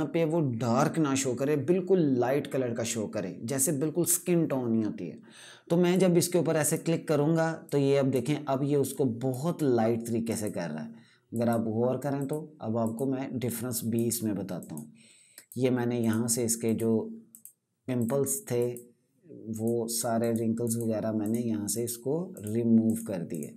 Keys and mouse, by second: 5.6 click.